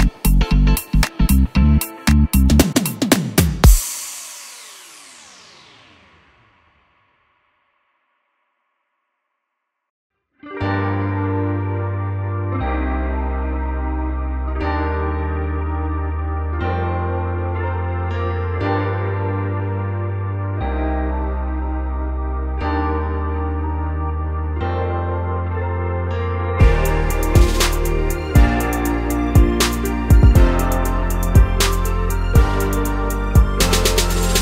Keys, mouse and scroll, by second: 0.5 click, 0.6 click, 0.8 Tab, 2.1 drag, 2.2-3.1 shift+middle drag, 2.7-3.1 scroll up 2, 3.7 middle click, 3.8 click, 4.0 Tab, 4.1 scroll up 1, 4.7 shift+middle click, 4.9 3, 5.5 click, 5.7 shift+click, 6.4 shift+d, 6.6 Return, 7.1 click, 7.6 middle click, 8.2 Tab, 8.5 click, 8.8 ctrl+x, 9.7-11.0 middle drag, 11.0 click, 11.3 click, 11.6 click, 12.1 x, 13.3 middle click, 13.7 3, 13.7 click, 13.9 click, 14.1 middle click, 14.4 2, 14.4 click, 14.7 click, 14.9 a, 15.5-22.5 middle drag, 17.0 KP_3, 22.5 click, 23.2 click, 24.4 z, 25.5-25.9 scroll down 1, 25.9-26.2 scroll up 1, 26.4 z, 27.2-27.8 scroll up 1, 27.8-34.4 shift+middle drag.